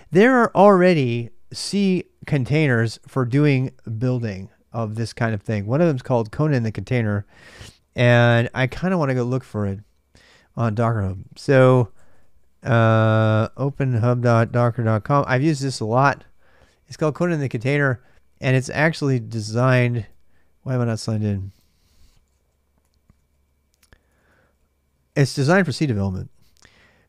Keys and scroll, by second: 9.0-15.5 typing, 21.8-24.7 typing.